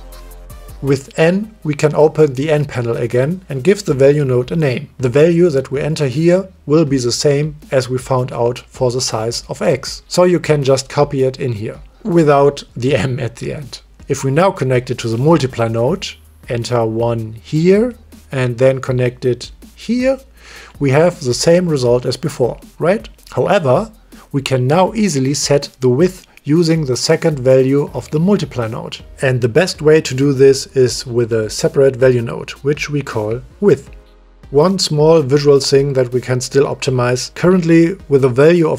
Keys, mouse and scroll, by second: 2.4 n, 2.9 click, 3.5 click, 4.0 ctrl+z, 4.2-5.5 drag, 6.0 click, 9.1 ctrl+c, 10.5 ctrl+v, 12.2-14.4 drag, 14.1 BackSpace, 15.5-16.0 drag, 16.2-17.2 drag, 18.8-19.5 drag, 20.4-21.1 drag, 24.7 click, 26.2 click, 27.4 shift+d, 30.9-34.6 drag, 35.2 click, 37.4 click, 37.7 click.